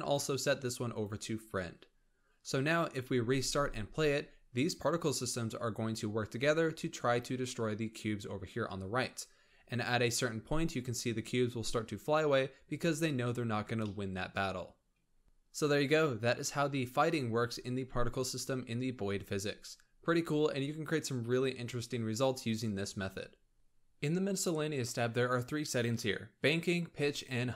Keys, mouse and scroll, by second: 3.2 space, 10.8-11.4 scroll down 2, 12.5 scroll down 3, 13.7-14.5 shift+middle drag, 14.5-15.1 scroll up 4, 15.1 shift+middle click, 15.2 space, 16.9-17.2 scroll down 3, 17.2-18.7 scroll up 3, 18.7-19.5 scroll up 4, 19.5-22.5 scroll down 5.